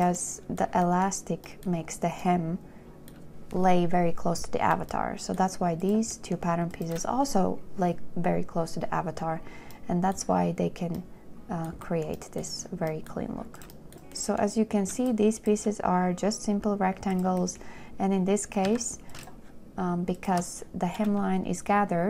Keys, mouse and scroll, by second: 13.9 shift+w, 19.0 z, 19.6 shift+click, 20.4 click.